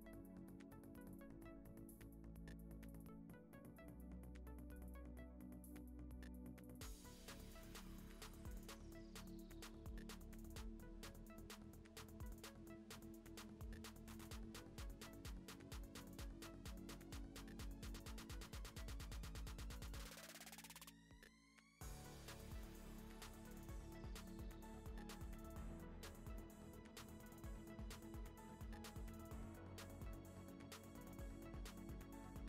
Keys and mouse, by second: 0.2 middle click, 0.8 Tab, 1.0 click, 1.2 alt+s, 2.4 click, 2.4 g, 3.3 Tab, 3.4 q, 5.2 ctrl+j, 5.6 middle click, 6.9 click, 9.3 click, 9.9 click, 10.8 click, 10.9 ctrl+s, 11.0 middle click, 13.8 click, 14.0 Tab, 14.1 3, 14.4 2, 14.6 g, 15.1 3, 15.1 click, 18.9 middle click, 19.6 Tab, 19.9 middle click, 20.8 shift+middle click, 21.3 ctrl+s, 21.6 middle click, 22.2 Tab, 22.4 Tab, 22.4 click, 22.8 Tab, 22.8-25.0 typing, 24.2 Tab, 24.6 Tab, 26.3 middle click, 26.3 a, 26.4 alt+e, 27.1 ctrl+z, 27.3 shift+n, 27.5 alt+e, 28.8 middle click, 29.2 click, 29.2-31.6 typing, 29.3 shift+middle click, 30.4 middle click, 30.8 middle click, 32.0 Tab, 32.2 middle click.